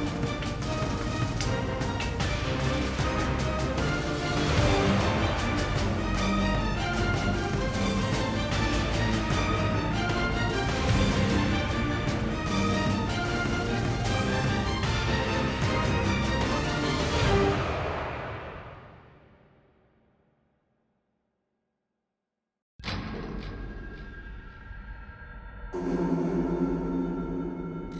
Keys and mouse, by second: 0.0 KP_Decimal, 0.2 middle drag, 0.8 ctrl+Tab, 1.6 g, 2.7 g, 3.3 Tab, 4.0 Tab, 4.1 Tab, 4.4 Tab, 7.1 ctrl+x, 7.6 ctrl+x, 10.0 ctrl+x, 10.6 ctrl+x, 10.8 Tab, 10.9 Tab, 12.3-13.0 alt+shift+right drag, 13.6 ctrl+x, 15.8 KP_7, 16.8 ctrl+z, 17.0 ctrl+x, 18.0 Tab, 18.1 Tab, 18.4 Tab, 18.8 KP_Divide, 19.0-23.5 typing, 20.4 Tab, 20.6 Tab, 23.7 alt+c, 24.1 ctrl+a, 24.8-27.9 typing, 25.0-25.4 drag, 25.4 alt+c, 26.3 Tab, 27.1 KP_Divide.